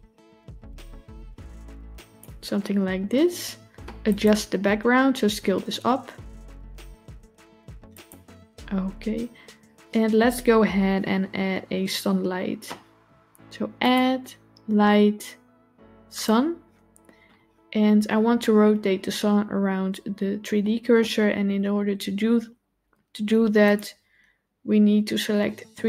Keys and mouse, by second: 4.0 click, 5.0 s, 13.7-16.2 drag, 23.5-25.8 drag.